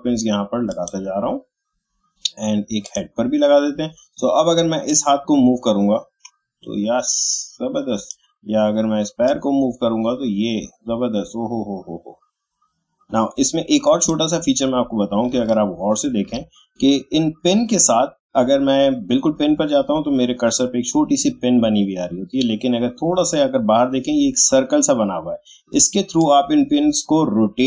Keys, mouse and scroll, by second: 15.6 alt+scroll up 1, 26.2-27.6 drag.